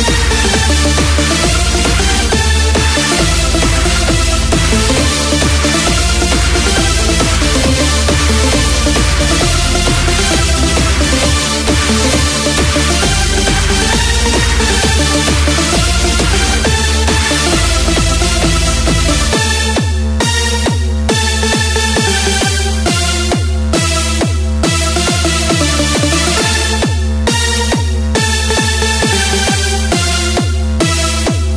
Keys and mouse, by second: 5.3 shift+a, 21.4-25.4 drag.